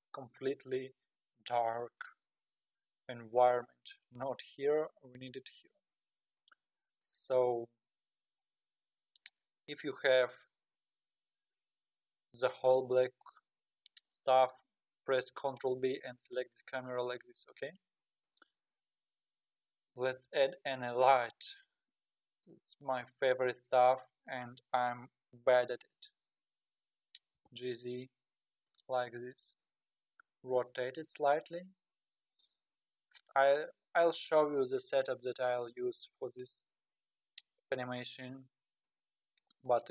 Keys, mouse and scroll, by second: 2.5 click, 4.2 z, 5.3 z, 7.8 z, 15.2 ctrl+b, 16.7 ctrl+b, 20.2 shift+a, 25.6 KP_3, 27.3 g, 27.5 g, 30.1 r, 32.2-32.8 scroll down 1, 32.8-33.4 scroll down 1, 33.4-35.2 scroll down 1.